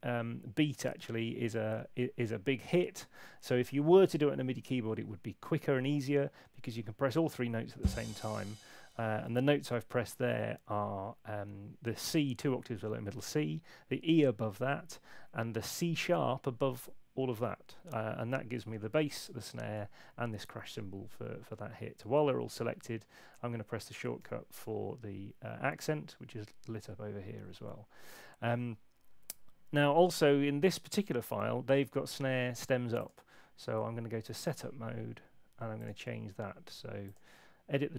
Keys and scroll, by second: 17.7 Escape, 24.2 [.